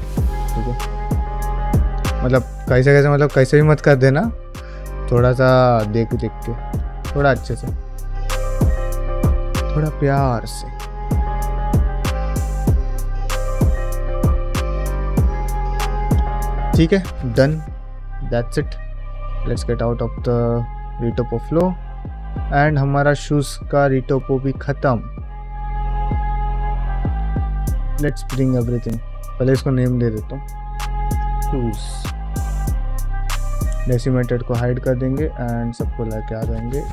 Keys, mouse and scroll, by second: 19.2 shift+middle click, 19.7 middle click, 20.3 middle click, 21.1 middle click, 21.5 ctrl+Tab, 21.9 middle drag, 22.4 click, 22.7 middle click, 23.1 ctrl+middle click, 23.5 middle click, 23.8 shift+middle drag, 24.1-24.7 middle drag, 24.8 shift+middle drag, 26.0 KP_Divide, 26.6 middle click, 29.2 click, 30.4 F2, 33.9-36.2 drag, 36.5 click, 36.8 q.